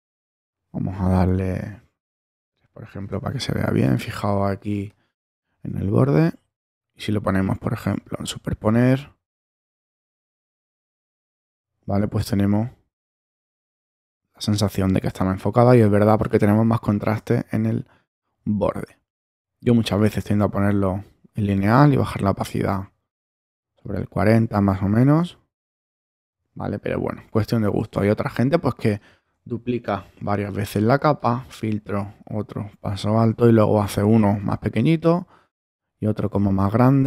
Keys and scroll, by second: 3.0 Return, 3.5 space, 29.8 super+j.